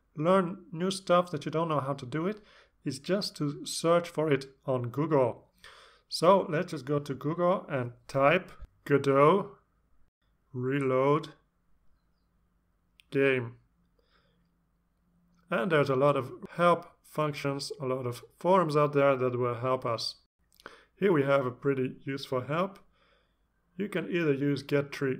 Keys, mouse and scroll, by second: 9.2 click, 9.3-14.5 typing, 19.2 click, 21.0-21.6 scroll down 4.